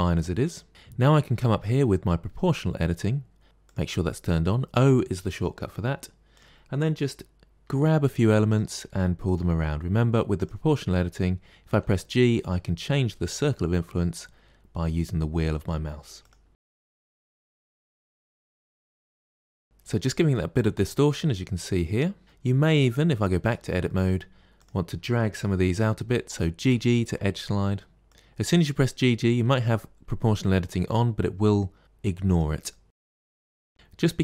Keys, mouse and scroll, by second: 3.6 click, 6.3 click, 7.6 g, 9.2 click, 9.4 g, 11.7 g, 16.5 middle click, 16.8 click, 16.8 g, 17.4 middle click, 17.7 click, 17.7 g, 17.9 middle click, 18.1 click, 18.2 g, 18.4 middle click, 18.6 click, 18.6 g, 18.8 middle click, 19.3 middle click, 19.5 Tab, 19.6 scroll down 5, 20.1-22.4 middle drag, 22.6 scroll up 4, 23.4 Tab, 23.8 middle click, 24.6 click, 26.6 g, 28.1 middle click, 29.0 click, 29.3 g, 32.7 middle click, 33.1 g, 33.4-34.2 middle drag.